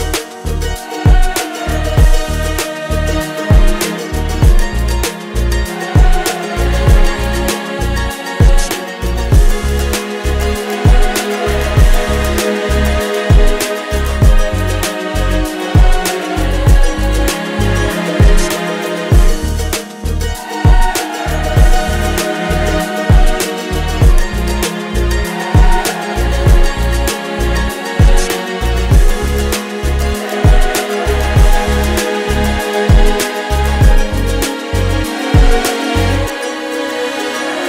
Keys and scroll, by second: 1.7 Return, 13.5 o, 15.6 space, 15.8 d, 16.2 a, 16.5 t, 17.7 BackSpace, 18.6 y, 19.9 Return.